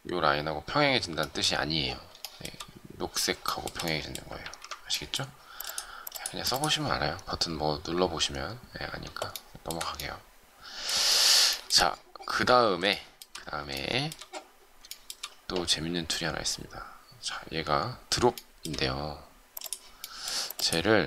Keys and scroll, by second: 4.4 ctrl+shift+z.